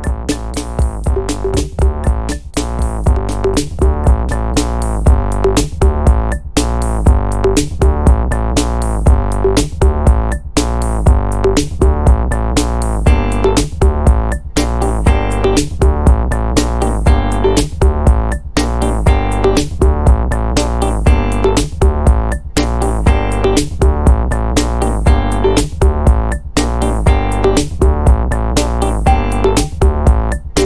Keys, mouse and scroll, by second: 0.0 click, 1.5-3.5 drag, 3.9 click, 5.5 click, 7.0 1, 8.0-9.6 drag, 9.8 click, 10.9-12.7 drag, 19.4 click, 19.9 click, 21.7 click, 24.9 click, 25.7 click, 26.9 3, 27.5 click, 28.6 click, 29.2 click.